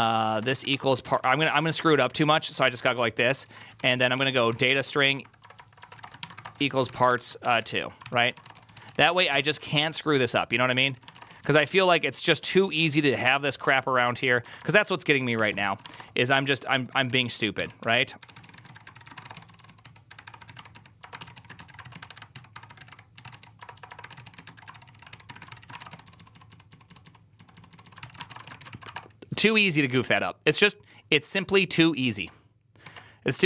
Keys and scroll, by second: 0.0-29.0 typing.